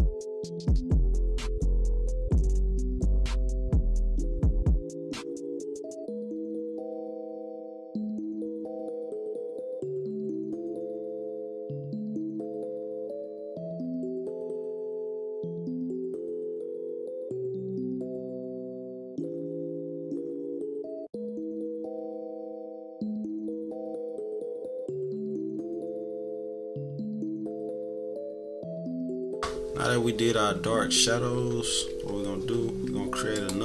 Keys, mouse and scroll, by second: 0.8 right click, 1.1 -, 1.6 click, 1.8 scroll up 1, 2.1 click, 2.3 click, 2.4 =, 2.5 =, 2.6 scroll down 3, 2.8 =, 3.1 =, 3.5 click, 3.7 click, 3.9 click, 4.2-5.2 drag, 5.4 click, 5.6 middle click, 6.0 click, 6.4-10.1 drag, 10.7-12.6 drag, 13.2-14.4 drag, 14.9-16.1 typing, 16.4 scroll down 2, 16.6 click, 16.7 click, 17.0 click, 17.2 click, 17.6 click, 18.7 click, 18.9 scroll up 1, 18.9 -, 19.0 =, 19.6 click, 19.8-24.1 drag, 24.5 -, 24.9-25.3 scroll up 2, 25.0 =, 25.3 scroll down 1, 25.3 =, 25.8-27.4 drag, 27.7 ctrl+-, 28.0-28.8 scroll up 9, 28.3 -, 28.5 =, 28.9 ctrl+-, 31.0 -, 31.6 =, 33.3 click.